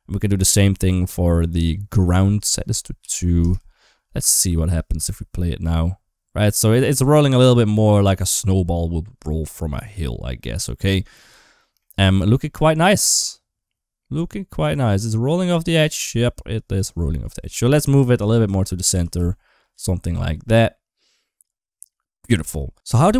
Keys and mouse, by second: 2.3 click, 4.0 space, 4.8 space, 11.6 middle click, 16.6 click, 16.6 space, 16.9 middle click, 17.4 shift+middle click, 18.3 shift+middle click, 19.0 g, 22.5 middle click.